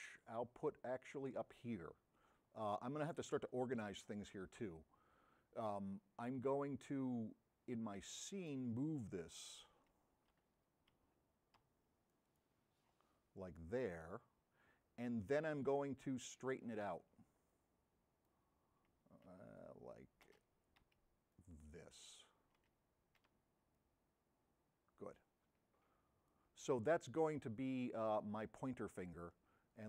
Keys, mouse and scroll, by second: 8.1 middle click, 12.2-16.7 middle drag, 12.2 v, 22.2 n, 22.9 b, 23.8 v.